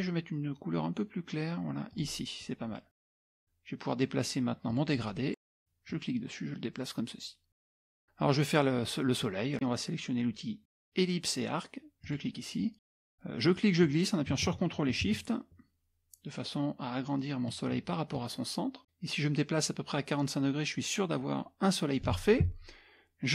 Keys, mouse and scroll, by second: 1.9 click, 4.7 click, 5.9-7.8 drag, 12.0 click, 13.6 click, 20.5-22.1 ctrl+shift+drag.